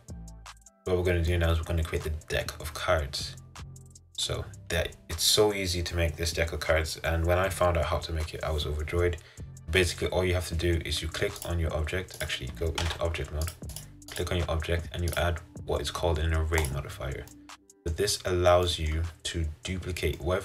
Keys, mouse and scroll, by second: 1.1-1.4 scroll down 1, 1.4-2.8 middle drag, 2.8-3.7 scroll up 4, 3.7-4.0 scroll down 2, 4.0-8.5 middle drag, 9.7-11.6 middle drag, 11.6 click, 12.4 click, 13.0 Tab, 13.6 click, 13.9 click, 14.3 click, 16.8 click, 17.4 middle click, 18.2-18.8 scroll down 3, 18.8 middle click, 19.7-20.3 scroll down 1, 20.3-20.4 middle drag.